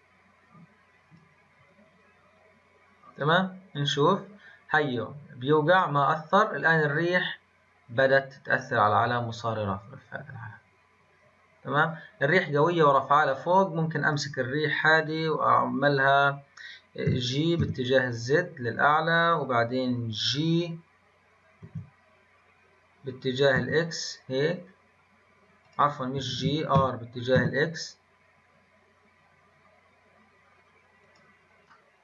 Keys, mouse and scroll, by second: 1.4-11.8 drag, 31.6-32.0 middle drag.